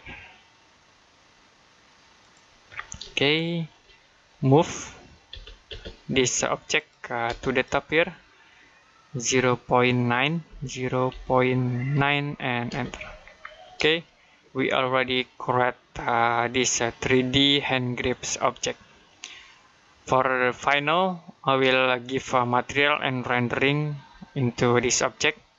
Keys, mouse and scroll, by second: 2.0 click, 2.6 scroll down 1, 3.0 shift+middle click, 3.7 middle click, 5.1-5.5 typing, 6.6 click, 7.1 space, 7.4 click, 10.3 typing, 11.5-12.5 typing, 13.2-13.7 scroll down 1, 13.9 middle click, 25.0-25.4 scroll down 1, 25.4 middle click.